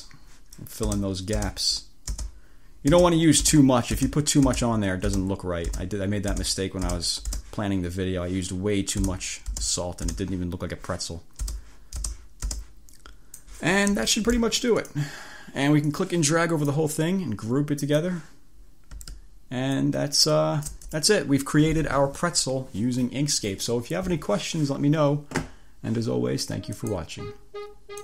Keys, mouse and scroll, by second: 0.1 space, 0.9 space, 2.2 space, 3.0 space, 7.2 space, 9.1 space, 11.1-13.7 drag, 11.5 space, 13.9 1, 14.5 click, 16.0-17.0 drag, 17.9 click, 19.9-21.3 ctrl+shift+drag, 26.9 click.